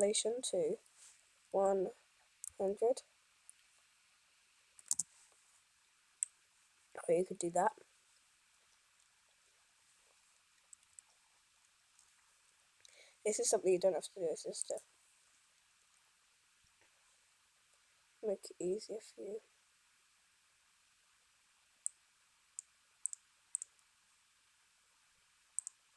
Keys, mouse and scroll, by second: 2.9 0, 6.3-10.9 drag, 10.9 n.